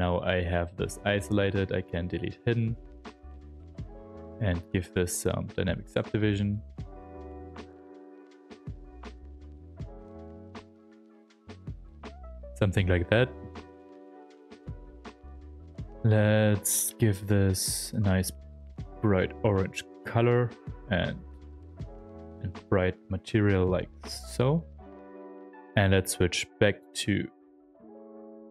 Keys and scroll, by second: 1.9 alt+d, 5.2 s, 18.0 ctrl+f, 20.1 ctrl+f, 24.0 ctrl+shift+f, 26.0 s.